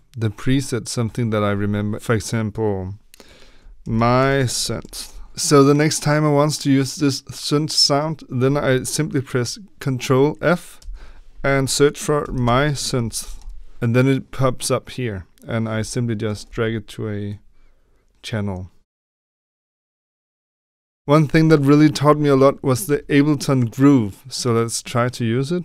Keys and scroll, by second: 3.5-5.5 typing, 10.7 ctrl+f, 11.9-13.8 typing, 16.4 Tab, 21.3 Delete, 22.8 Tab.